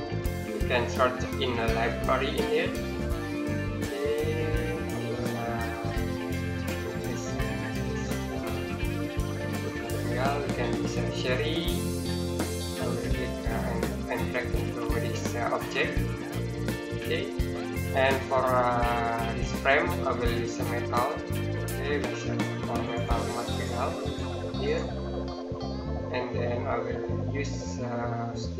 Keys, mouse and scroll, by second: 1.2-4.2 scroll down 1, 4.2 click, 8.5-8.9 scroll up 1, 12.5 click, 20.2-22.6 scroll up 1, 22.6 click, 26.9 scroll down 1.